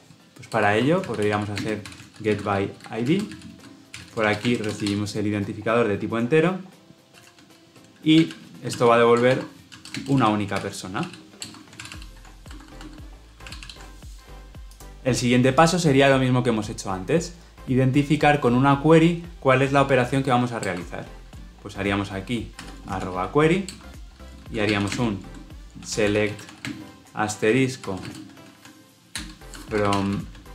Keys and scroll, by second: 5.2 Escape, 11.4 Return, 11.7 ctrl+alt+l, 11.9 ctrl+alt+o, 13.5 ctrl+alt+l, 13.5 ctrl+alt+o, 23.6 Return.